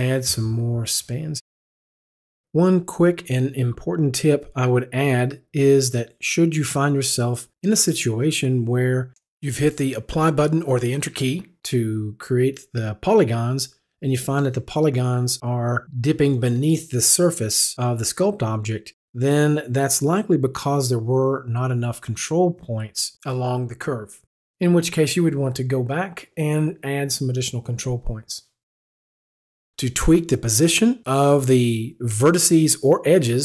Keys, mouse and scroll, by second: 0.7 click, 9.5 click, 11.3 click, 13.1 Return, 16.4 ctrl+z, 17.0 Escape, 18.0 click, 20.1 click, 22.7 click, 25.1 Return, 26.2 right click, 30.8-31.4 scroll down 1.